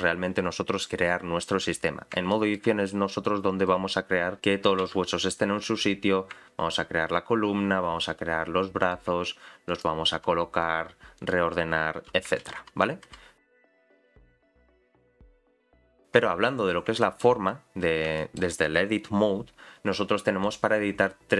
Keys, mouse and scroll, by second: 0.0-1.8 scroll down 1, 1.8-2.3 scroll down 5, 2.3 shift+middle click, 3.2 click, 4.8 a, 5.1-5.6 scroll down 1, 5.6-6.4 scroll down 2, 5.6 g, 9.7 click, 10.1 g, 12.4 ctrl+z, 12.6 ctrl+z, 13.2 ctrl+z, 16.3-16.8 scroll up 6, 17.0 shift+middle click, 17.5-18.1 scroll up 1, 18.1 scroll up 1, 18.2 shift+middle click, 20.4 click.